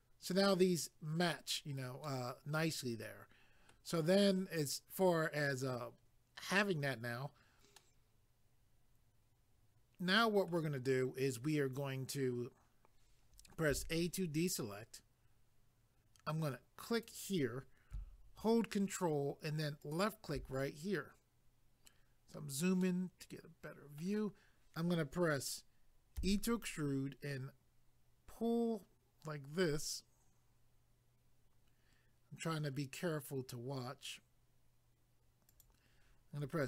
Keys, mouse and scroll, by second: 2.0 middle click, 7.8 middle click, 13.7 a, 16.9 click, 19.8 ctrl+click, 21.9-22.8 scroll down 1, 22.8 middle click, 35.5 click.